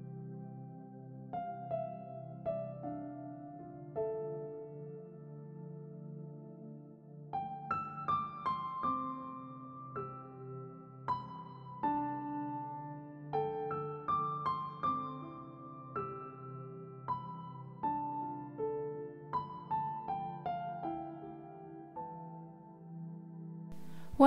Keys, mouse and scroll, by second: 0.2 ctrl+r, 2.5-3.9 middle drag, 3.9 ctrl+r, 5.3 ctrl+z, 5.8 ctrl+r, 7.4 middle click, 8.4-8.7 scroll down 4, 9.1-9.4 shift+middle drag, 9.4 scroll up 1, 10.4 ctrl+s, 10.6 middle click, 10.6 ctrl+a, 12.6-13.3 middle drag, 13.3 click, 13.3 h, 14.3-16.6 drag, 17.1 click, 17.2 click, 18.0 s, 19.1 scroll up 1, 19.2 middle click, 19.8 ctrl+r, 21.2 scroll down 5, 21.5 Tab, 21.7-22.4 middle drag, 22.4 ctrl+s, 22.9 scroll up 1, 23.0 Tab, 23.1 click, 23.3 l, 23.4 scroll up 2, 23.5 middle click, 23.7 s, 24.1 g.